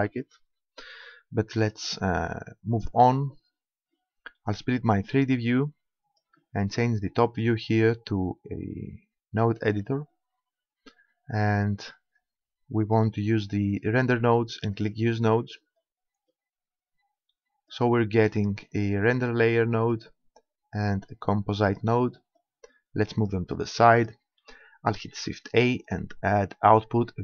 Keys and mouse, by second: 0.0 Escape, 4.9-6.6 drag, 12.8-14.6 drag, 14.8-16.4 drag, 16.4-17.7 middle drag, 17.7 click, 21.2-25.9 drag, 25.1 shift+a.